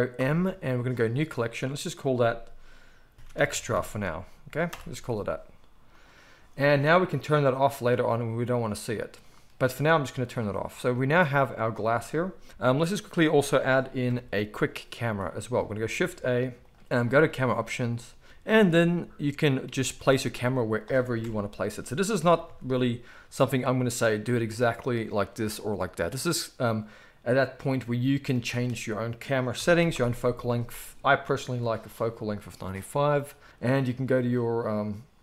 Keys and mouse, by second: 0.2 m, 7.6 middle click, 7.7 right click, 8.5 middle click, 8.6-10.2 right drag, 10.2 middle click, 10.4-12.8 right drag, 11.6 click, 11.6 middle click, 12.5 KP_1, 13.0-35.2 right drag, 16.7 shift+a, 18.4 g, 19.6 g, 21.2 KP_0, 22.2 r, 24.2 g, 25.4 g, 28.3-35.2 drag, 28.3-35.2 middle drag.